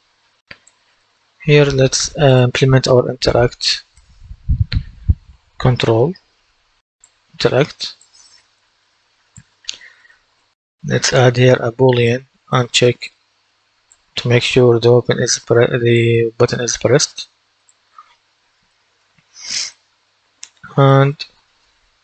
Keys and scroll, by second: 4.6 a, 12.4 typing.